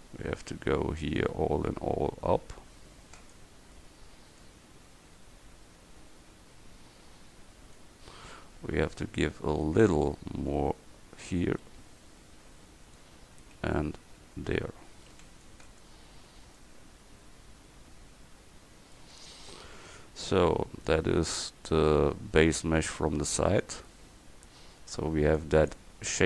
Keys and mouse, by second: 0.8 c, 4.5-7.8 drag, 8.9 a, 9.3 c, 13.4 a, 15.2 c, 19.4 Tab, 23.8 KP_1.